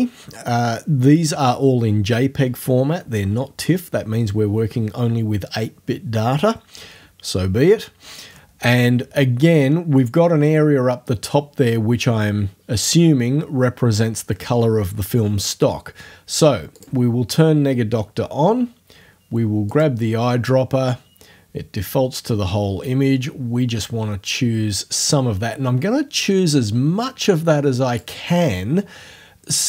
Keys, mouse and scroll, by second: 16.8 click, 19.7 click, 22.3-28.2 drag.